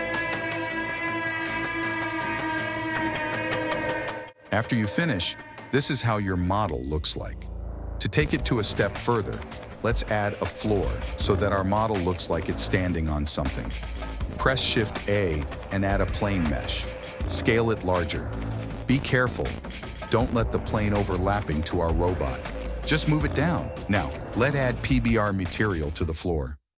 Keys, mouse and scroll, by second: 0.3 middle click, 0.5 drag, 0.6 shift+middle click, 1.0 shift+click, 1.4 shift+click, 1.7 KP_1, 2.1 shift+d, 2.8 shift+d, 3.9 click, 11.8 middle click, 12.6 a, 12.8 g, 15.1 shift+a, 16.8 s, 21.6 KP_1, 22.3 g, 26.6 click.